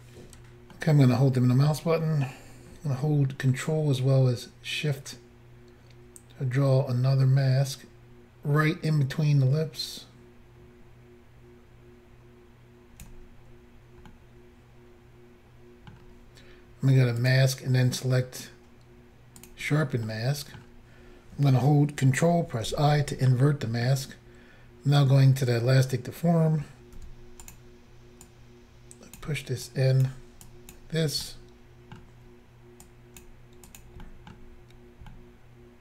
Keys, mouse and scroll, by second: 0.8 middle click, 14.2 middle click, 17.3 click, 17.3 click, 19.4 click, 19.5 click, 20.1 middle click, 22.7 ctrl+i, 23.3 middle click, 27.1 f, 27.5 click, 27.6 click, 28.3 click, 29.7 click, 30.5 click, 31.3 middle click, 32.9 click, 33.7 click, 33.8 click, 34.1 middle click, 35.1 middle click, 35.7 scroll down 1.